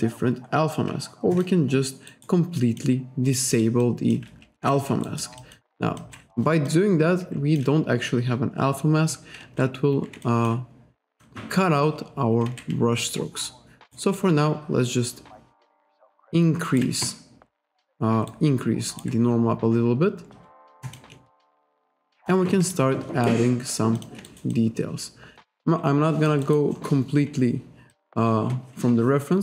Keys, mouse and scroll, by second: 1.4 click, 2.1 alt+right click, 2.6 alt+click, 3.3 click, 3.9 alt+click, 4.6 ctrl+z, 5.1 alt+right click, 5.5 alt+click, 6.0 click, 6.7 alt+click, 9.5 ctrl+z, 10.3 alt+click, 11.2 click, 12.5 ctrl+z, 13.2 ctrl+right click, 14.2 ctrl+right click, 18.4 ctrl+right click, 20.9 click, 21.4 alt+middle click, 21.8 alt+click, 22.8 ctrl+right click, 24.0 click, 24.3 alt+right click, 24.6 alt+click, 26.5 alt+right click, 26.8 alt+middle click, 28.0 click.